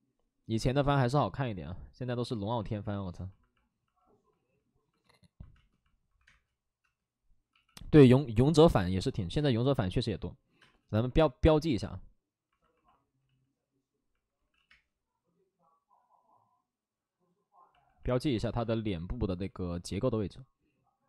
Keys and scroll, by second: 5.5-7.4 typing, 8.7 space, 10.5 space, 13.1 ctrl+z, 13.1 5, 14.3 ctrl+z, 14.6 ctrl+z, 14.6 space.